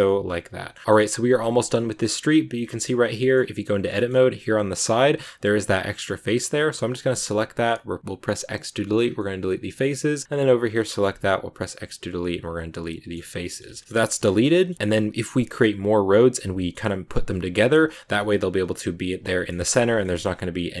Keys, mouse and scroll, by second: 0.0-1.9 middle drag, 1.9-2.5 scroll up 3, 2.5 scroll down 2, 2.6 shift+middle click, 3.3-3.8 scroll up 2, 3.8-4.8 middle drag, 4.8-5.8 scroll up 1, 5.8 right click, 6.3 scroll up 1, 6.4 middle click, 6.9 x, 8.8 scroll down 2, 9.1 middle click, 9.7 scroll up 3, 10.2 right click, 10.5 scroll down 1, 10.6 middle click, 10.9 x, 12.3 scroll down 1, 12.4 middle click, 13.1 Tab, 13.2 scroll down 2, 13.3 shift+middle click, 13.8 Tab, 13.9 Tab, 14.0 middle click, 14.2 scroll down 2, 14.4-16.0 middle drag, 16.2 shift+d, 17.5 scroll up 6, 18.0-19.1 middle drag, 19.1 scroll down 2, 19.2 middle click, 19.5 x, 19.7 middle click, 20.0-20.8 scroll up 2.